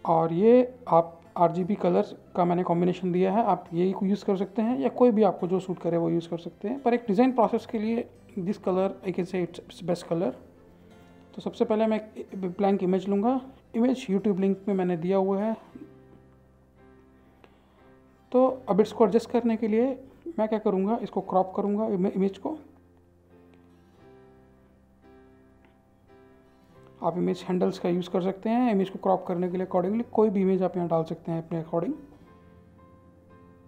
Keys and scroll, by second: 0.5 ctrl+c, 2.4 ctrl+v.